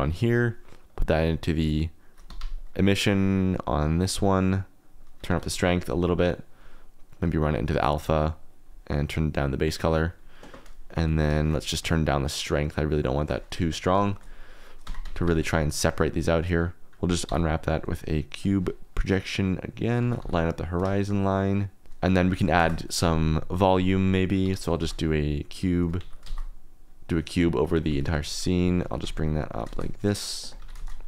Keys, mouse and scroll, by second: 0.0 click, 0.3 click, 0.8 click, 1.3-2.4 drag, 2.2 Escape, 2.5 click, 3.5 click, 4.0-4.7 drag, 4.9 click, 7.1-7.6 drag, 8.4 click, 9.3 click, 11.3 shift+click, 11.8-13.2 shift+drag, 14.0-15.9 shift+drag, 15.9 Tab, 16.0 a, 16.0 q, 17.2 u, 20.0 g, 20.2 y, 21.8 Tab, 22.2 drag, 22.7 shift+a, 24.4 x, 24.7 shift+a, 25.9 x, 26.2 shift+a, 27.9-31.0 typing, 30.1 click.